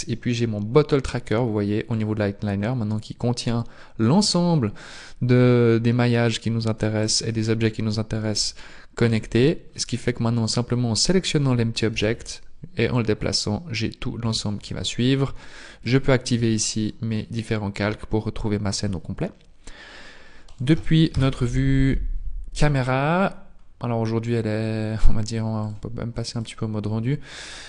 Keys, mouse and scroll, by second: 7.6 click, 9.1 right click, 9.7-10.2 scroll down 1, 10.2-10.5 scroll down 2, 11.9 g, 15.8 shift+click, 16.7-17.2 scroll down 2, 17.2 middle click, 20.5 right click, 21.1 KP_0, 22.5-23.5 scroll up 1, 23.5-24.1 scroll down 2, 24.1 scroll up 1, 25.6 click.